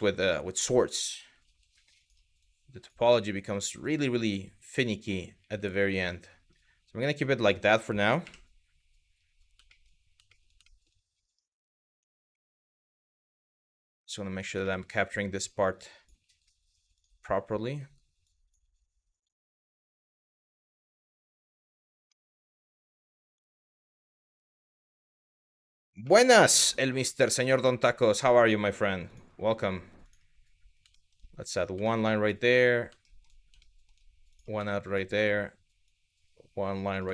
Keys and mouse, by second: 0.2 click, 1.1 g, 1.6 click, 2.1 click, 2.6 g, 3.4 click, 3.6 g, 4.2 click, 5.6 click, 6.8 middle click, 7.8 KP_1, 9.3 shift+middle click, 9.9 shift+middle click, 10.3 shift+middle click, 12.0 shift+middle click, 12.8 shift+middle click, 14.3 shift+middle click, 14.9 click, 15.5 click, 15.8 g, 16.6 click, 17.3 click, 17.4 g, 18.0 click, 18.7 click, 19.2 click, 20.4 click, 22.1 middle click, 22.7 middle click, 25.8 shift+middle click, 26.5 shift+middle click, 27.2 shift+middle click, 29.6 click, 30.6 shift+middle click, 31.1 click, 31.5 shift+middle click, 32.6 shift+middle click, 33.3 shift+middle click, 33.9 click, 34.3 shift+middle click, 35.5 click, 36.8 shift+middle click.